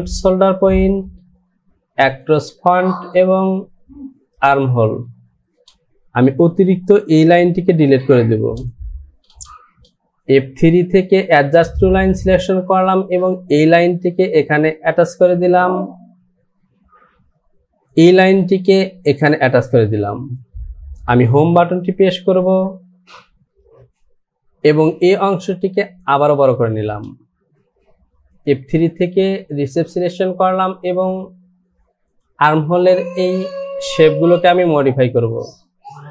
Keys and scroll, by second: 21.7 Home.